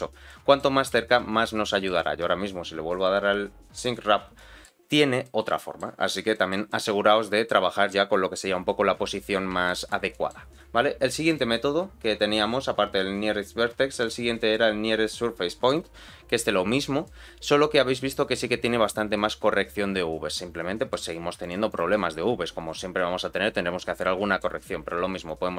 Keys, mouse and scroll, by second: 0.3 middle click, 0.9 z, 1.4 middle click, 2.0 z, 3.7 click, 4.3 middle click, 4.8-5.2 scroll up 2, 5.2 middle click, 6.0 scroll down 2, 6.3 shift+middle click, 6.7 middle click, 9.1-9.6 scroll up 2, 9.6 shift+middle click, 10.1 middle click, 11.2-15.7 drag, 16.7-17.0 scroll down 2, 17.0-21.0 middle drag, 21.4 right click, 22.0-24.5 middle drag, 25.2-25.5 shift+drag.